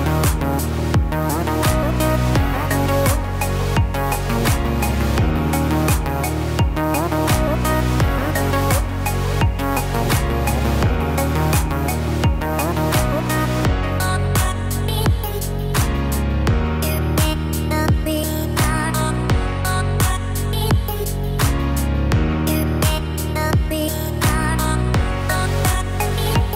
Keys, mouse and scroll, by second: 1.6 Tab, 2.2 click, 2.6 middle click, 3.3-4.6 scroll up 3, 3.8 click, 5.4 click, 12.1 click, 12.8-14.1 click, 15.2 middle click, 16.3 scroll up 2, 17.1 middle click, 17.1 scroll up 1, 19.2 click, 20.1 click, 20.6-21.2 scroll down 2, 21.0 middle click, 21.6 scroll up 1, 21.8-22.4 scroll down 3, 22.4 middle click, 23.1-23.5 scroll up 2, 23.5 middle click, 23.9 middle click, 25.4 scroll down 2.